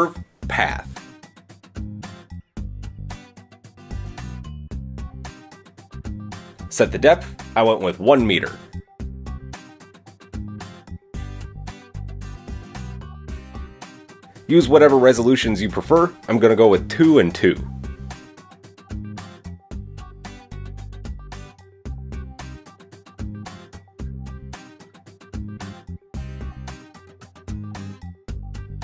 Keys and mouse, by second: 11.3-16.4 drag.